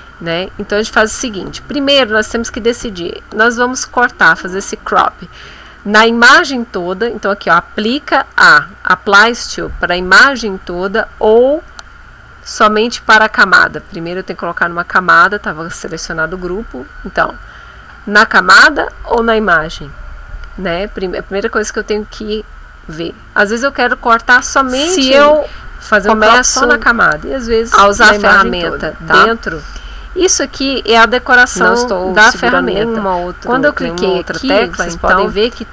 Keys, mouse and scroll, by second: 3.8 click, 8.6 click, 13.0 click, 13.8 click, 16.4 click, 25.3 Escape, 27.2 click, 29.7-35.7 drag.